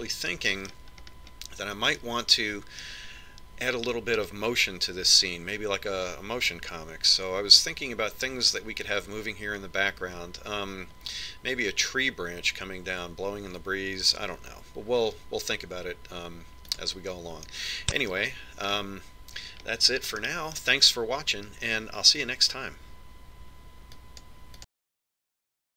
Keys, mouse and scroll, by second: 0.7-4.7 middle drag, 4.9 middle click, 17.8 click, 19.7-23.2 middle drag.